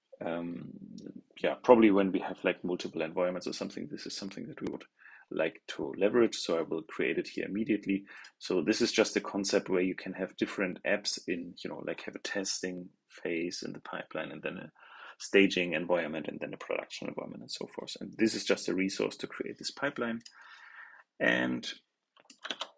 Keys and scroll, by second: 22.4 super+c.